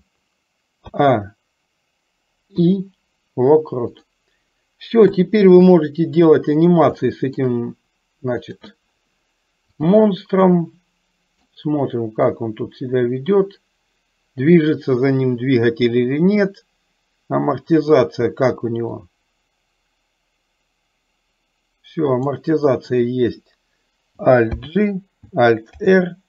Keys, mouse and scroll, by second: 1.0 a, 2.7 i, 5.1 KP_3, 7.2 shift+middle click, 8.5 click, 9.9 click, 10.6-11.6 middle drag, 12.5-18.3 drag, 19.1-22.6 drag, 24.6 alt+g, 26.0 alt+r.